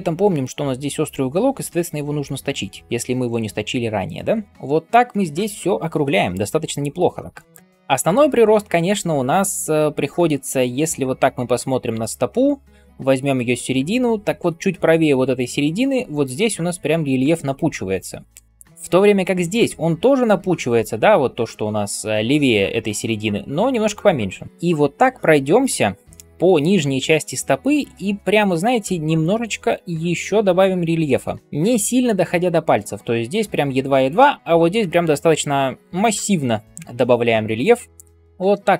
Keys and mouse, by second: 11.3-19.4 shift+drag, 11.3-19.4 shift+middle drag, 11.3-19.4 shift+right drag, 38.1 shift+click, 38.1 shift+middle click, 38.1 shift+right click.